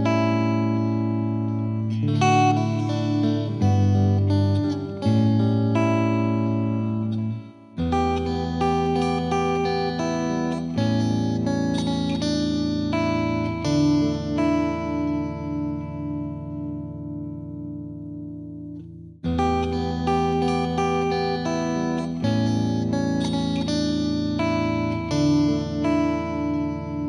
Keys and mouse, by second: 13.9-15.1 drag, 16.4-17.5 drag, 18.4-19.5 drag, 22.4-24.5 drag.